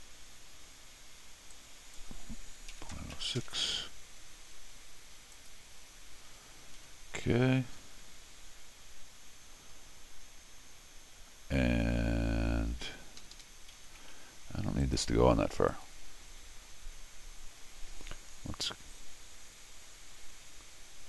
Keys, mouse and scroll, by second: 1.5 ctrl+click, 5.3 ctrl+click, 7.8 ctrl+middle click, 7.8 ctrl+scroll down 2, 8.4 ctrl+middle click, 8.4 ctrl+scroll up 2, 12.9 ctrl+middle click, 12.9 scroll, 13.2 ctrl+Escape, 13.3 ctrl+Escape, 13.8 ctrl+d, 14.8 ctrl+click, 15.7 ctrl+click.